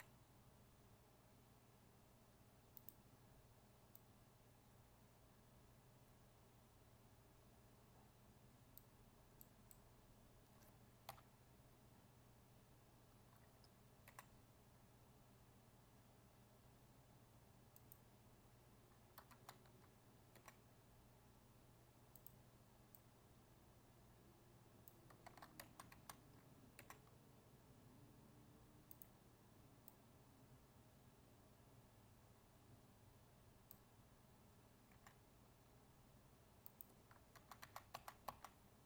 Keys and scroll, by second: 19.3 ctrl+z, 25.6 ctrl+z, 37.3 ctrl+z.